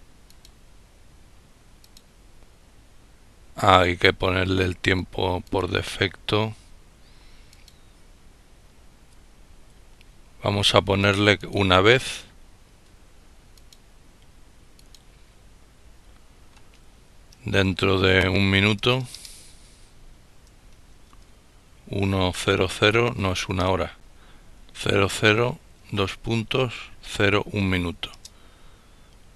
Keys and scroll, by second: 17.0 1, 19.8 shift+;, 23.6-24.7 typing, 25.8-26.3 typing, 26.8 Return.